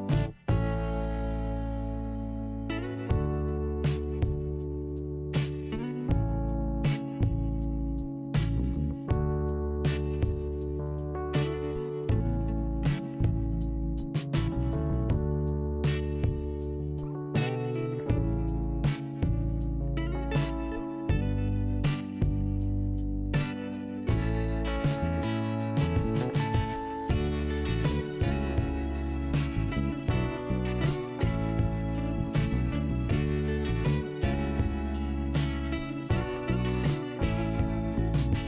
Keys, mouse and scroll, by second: 1.1 click, 7.3 click, 8.1 click, 8.7 scroll down 1, 9.7 scroll down 1, 10.4 scroll up 1, 11.1 click, 12.5 click, 14.0 click, 14.1 click, 16.1 click, 16.6-17.6 scroll down 2, 17.6 scroll up 2, 18.7 click, 23.0 click, 27.5 scroll down 1, 28.3 scroll up 1, 29.6 click, 30.9 click, 37.6 click, 38.2-38.4 scroll down 1.